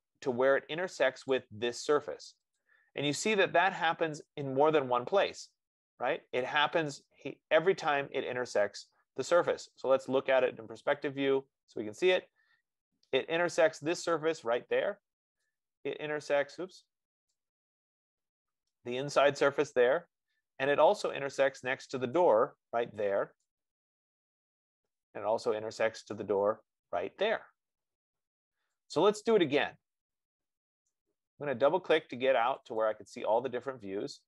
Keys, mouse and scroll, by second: 1.8 click, 7.2 click, 10.2 click, 10.7 click, 11.3 click, 12.2-12.5 scroll, 13.3-14.1 scroll, 15.1 click, 16.8 right click, 17.4 click, 22.5 right click, 26.1-31.5 right drag, 33.3 click, 33.5 click.